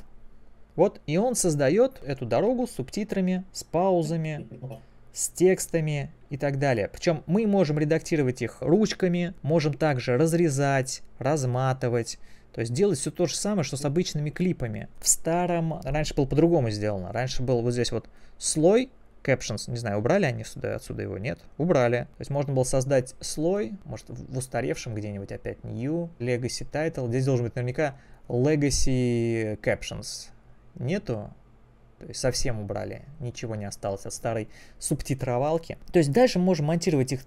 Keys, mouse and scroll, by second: 1.7 click, 2.0-2.6 typing, 3.4 click, 5.2 click, 5.8 click, 6.0 double click, 6.5 double click, 8.2 click, 8.8 click, 9.4 click, 11.2 click, 12.2 click, 13.8 click, 23.8 click, 34.4 click, 36.8 click.